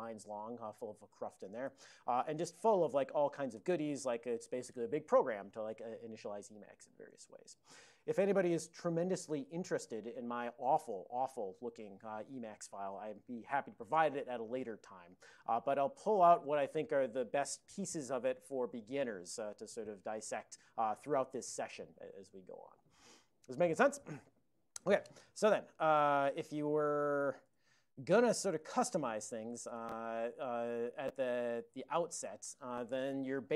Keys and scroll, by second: 1.7 alt+<, 2.4 ctrl+v, 3.0 ctrl+v, 3.6 ctrl+v, 4.1 ctrl+v, 26.3-27.4 typing, 27.5 Return, 28.3 ctrl+a, 28.7 alt+n, 29.7 Tab, 31.4 ctrl+l, 32.0 ctrl+l.